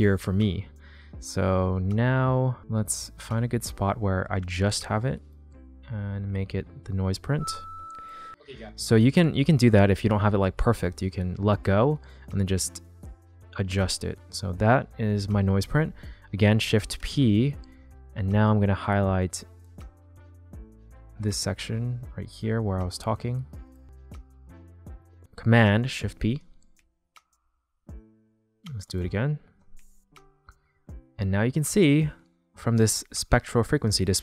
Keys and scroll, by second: 7.1 space, 17.0 shift+p, 26.0 shift+super+p.